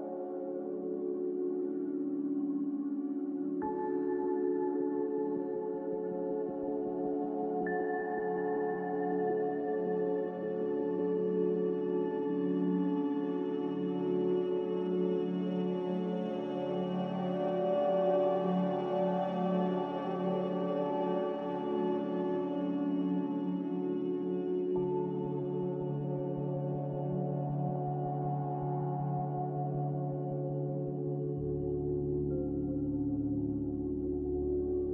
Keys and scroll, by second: 2.1 typing, 4.0 n, 5.5 z, 10.6 typing, 11.1 Return, 14.5-15.3 typing, 15.7 Return, 19.1-20.1 typing, 20.2 Return, 21.4 typing, 23.6 a, 25.4 m, 30.9 a.